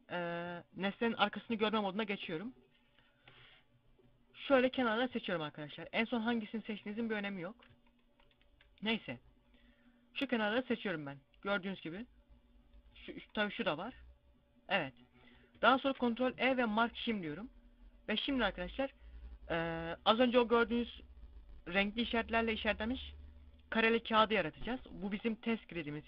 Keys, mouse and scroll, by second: 5.1 shift+right click, 10.8 middle click, 13.1 shift+right click, 13.8 middle click, 15.7 ctrl+e.